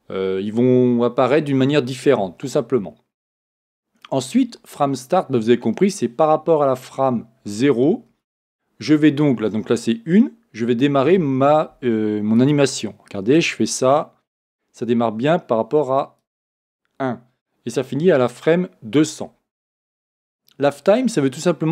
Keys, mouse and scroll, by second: 12.3-15.2 drag, 16.4 click.